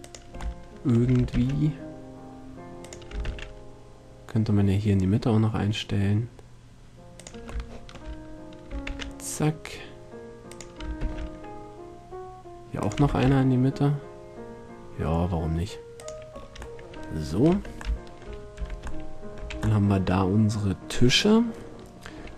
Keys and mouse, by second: 1.5 shift+d, 3.1-4.8 drag, 3.4 shift+d, 7.4-9.2 drag, 9.0 shift+d, 10.8-12.4 drag, 11.2 shift+d, 13.2 shift+d, 17.7 Tab, 18.8 z, 19.6 a, 20.0 middle drag, 21.6-22.3 middle drag.